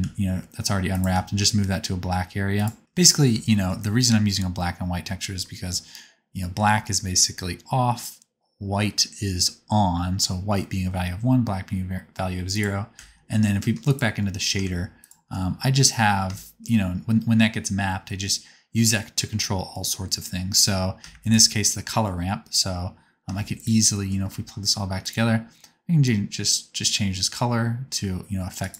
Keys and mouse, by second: 1.1 g, 4.2-12.4 middle drag, 12.4-13.9 drag, 13.9-15.0 middle drag, 15.0 ctrl+shift+click, 15.2-16.6 middle drag, 21.1 ctrl+shift+click, 23.5 ctrl+shift+click, 25.0 click.